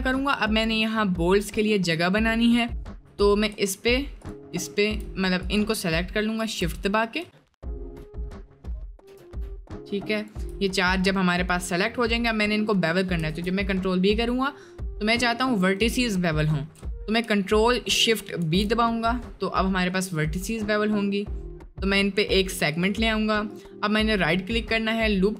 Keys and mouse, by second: 2.8 shift+middle click, 3.2 click, 4.2 shift+click, 4.6 shift+middle click, 5.4 click, 7.3 shift+middle click, 10.2 shift+click, 13.3 ctrl+b, 16.3 shift+middle click, 18.3 ctrl+shift+b, 23.6-25.3 drag.